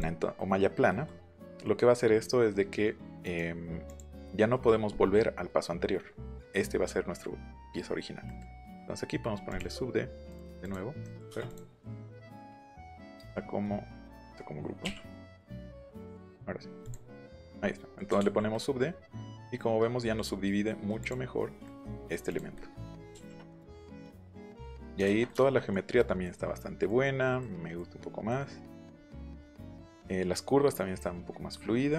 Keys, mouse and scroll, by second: 0.8 middle click, 1.6 middle click, 3.2 right click, 3.8 click, 8.2 middle click, 9.4 click, 10.2 click, 10.6 click, 10.9 scroll up 2, 11.4 click, 11.7 click, 12.4 Escape, 12.5 right click, 14.2 right click, 14.8 u, 15.8 ctrl+g, 16.8 click, 17.1 scroll down 1, 17.5 middle click, 18.5-20.1 middle drag, 21.0 click, 21.6 middle click, 22.2 click, 22.5 middle click, 23.1 ctrl+b, 23.5-24.6 middle drag, 27.3 middle click, 28.2 middle click.